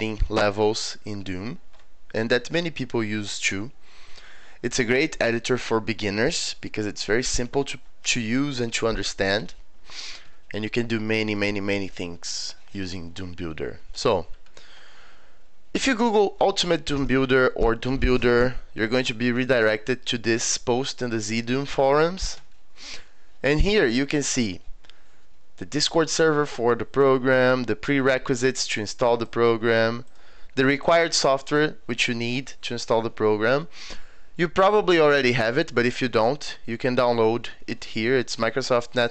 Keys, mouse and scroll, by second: 14.3 scroll down 2, 19.9-20.3 scroll up 4, 22.0-22.5 scroll down 4, 23.9 scroll down 4, 28.8 click, 29.6 scroll down 2, 30.1 click, 30.8 click.